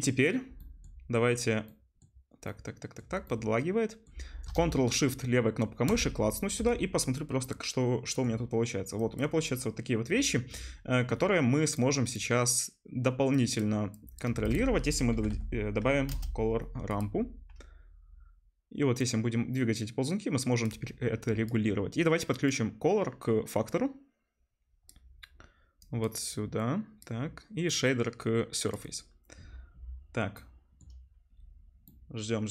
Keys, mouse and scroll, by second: 4.5-5.9 ctrl+shift+middle drag, 5.9-8.9 ctrl+shift+drag, 14.4 shift+a, 16.1 middle click, 16.9-18.9 drag, 18.9-26.0 middle drag, 19.4-26.3 drag, 19.4-26.0 right drag, 26.3-28.8 middle drag, 30.7 middle click, 32.1 middle click.